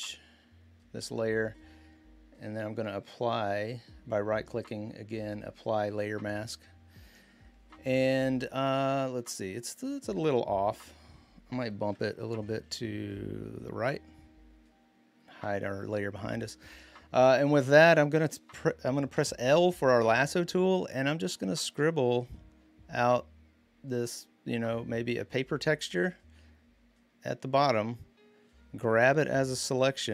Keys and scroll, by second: 12.0 Right, 12.2 Right, 12.4 Right, 12.6 Right, 12.7 Right, 12.9 Right, 18.9 |.